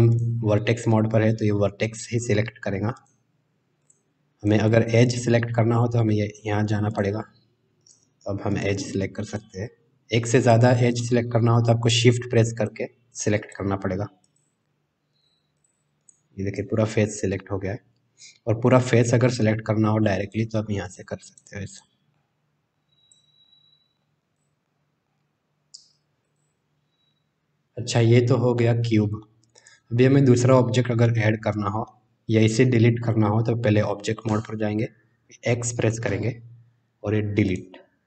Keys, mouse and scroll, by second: 0.1 click, 2.9 click, 4.3 click, 6.9 click, 7.8 click, 8.5 click, 9.2 click, 10.3 click, 10.9 click, 12.5 shift+click, 13.4 shift+click, 14.3 shift+click, 15.5 shift+click, 16.0 shift+click, 19.3 click, 20.2 click, 20.9 click, 21.2 click, 22.1 middle click, 23.4 middle click, 24.3 click, 24.6-25.0 middle drag, 26.2 click, 28.5-29.2 middle drag, 31.0-31.8 middle drag, 34.2 Tab, 36.0 x.